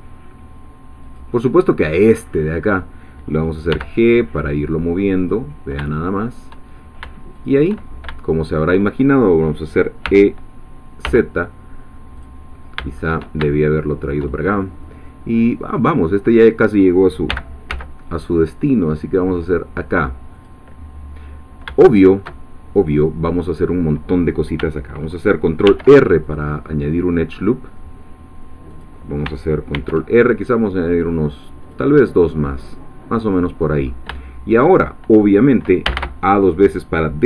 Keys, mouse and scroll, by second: 1.0 click, 2.3-3.7 drag, 3.7 g, 5.2 click, 7.3 shift+click, 7.8-8.2 shift+scroll down 2, 8.2-9.2 shift+middle drag, 10.1 e, 11.1 z, 12.2 click, 13.5-14.7 shift+middle drag, 14.7-16.5 scroll up 1, 16.5 click, 17.3-17.8 scroll up 1, 17.3 g, 17.7 z, 20.4 click, 21.4 scroll down 1, 21.8 shift+middle click, 22.3-22.9 shift+scroll up 1, 25.7 ctrl+r, 26.2 ctrl+click, 28.7 click, 29.7 ctrl+r, 30.3 ctrl+scroll up 2, 31.0 scroll down 1, 31.7 click, 33.2 click, 33.9 scroll up 1, 34.2 shift+middle click, 35.9 a.